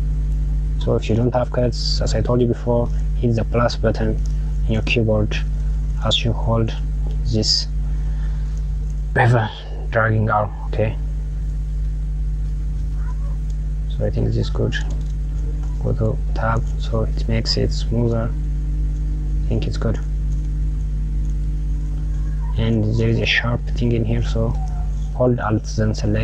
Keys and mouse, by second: 15.2 Tab, 16.2 click, 18.1 click, 20.1 click, 20.4 Tab, 20.9 Tab, 21.6 Tab, 25.7 alt+click.